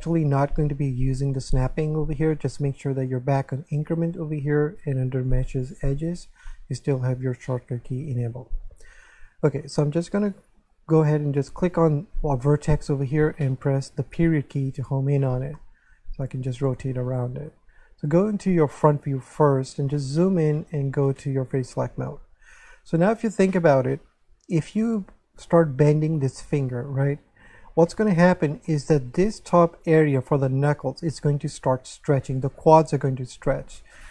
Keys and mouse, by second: 0.0 click, 2.2 click, 4.5 click, 11.7 right click, 14.2 KP_Decimal, 15.6 middle click, 18.7 1, 21.4 click, 27.8 middle click, 29.2 right click, 29.5 shift+right click.